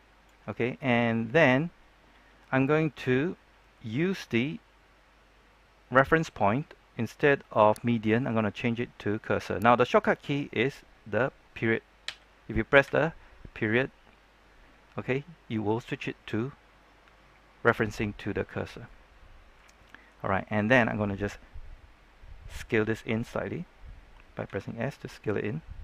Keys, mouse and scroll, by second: 18.8 middle click, 20.3 shift+middle click, 24.4 s.